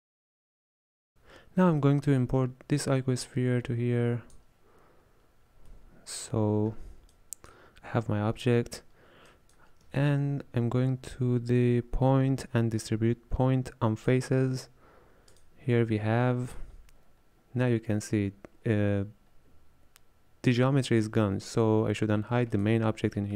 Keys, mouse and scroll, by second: 0.0-1.1 middle drag, 1.9-3.3 middle drag, 3.3 click, 5.8-7.2 middle drag, 7.2 click, 9.3 click, 10.0 shift+a, 22.6 click.